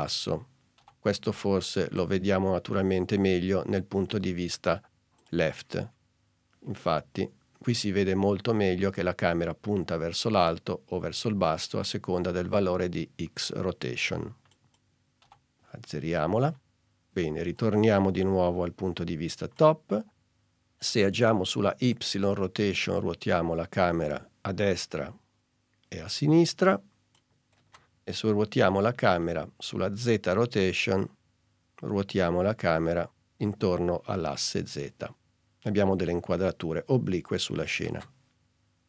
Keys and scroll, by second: 14.6 0, 15.3 Return, 27.8 super+z, 38.0 super+z.